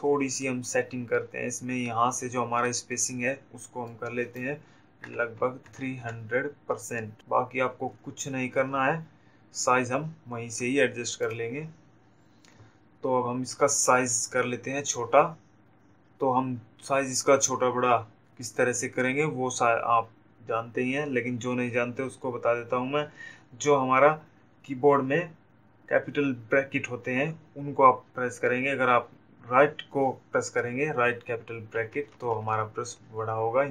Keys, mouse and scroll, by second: 3.2 click, 12.2 click, 31.5 typing.